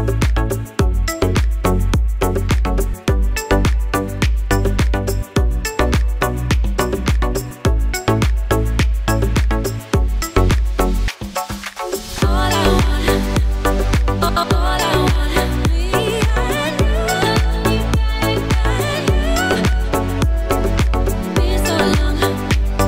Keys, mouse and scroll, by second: 3.3 ctrl+j, 4.5 click, 7.4 t, 9.5 shift+click, 13.5 alt+scroll up 1, 13.8 scroll down 1, 15.2 alt+click.